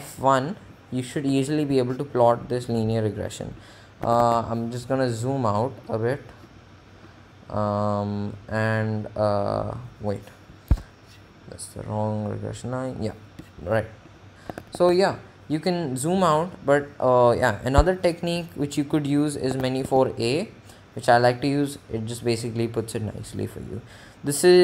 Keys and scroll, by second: 1.4 Return, 3.9 Menu, 4.3 4, 10.9 Escape, 14.5 Menu, 14.8 4, 17.9 Escape, 19.9 Menu, 20.0 a.